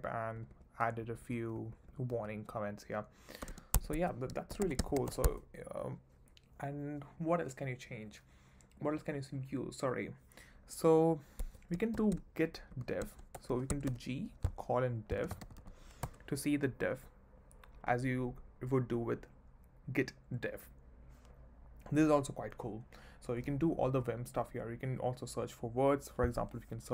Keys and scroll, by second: 1.0 k, 1.5 j, 2.1 k, 3.4-5.5 typing, 3.7 Escape, 11.4 Escape, 11.9-13.9 typing, 14.9-15.8 typing, 16.0 Return, 23.5 j.